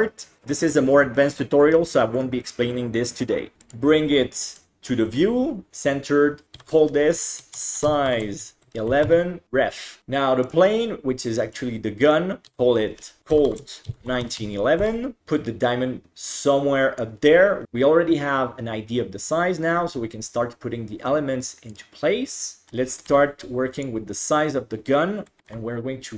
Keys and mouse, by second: 3.6-4.6 drag, 6.6 F2, 9.1 -, 10.5 click, 11.6 click, 12.5 F2, 14.4 1, 15.2-17.0 drag, 21.8 right click, 22.7 KP_7, 23.1 g, 25.3 s, 25.5 r.